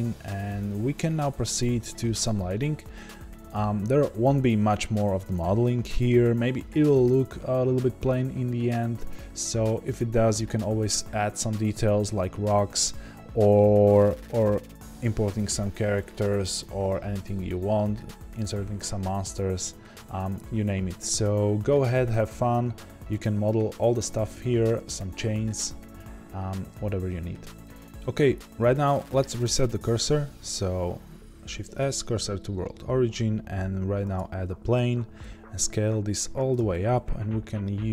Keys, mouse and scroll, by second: 1.1-5.5 scroll down 1, 31.7 shift+s, 34.1 shift+a, 35.2 s, 36.5 click.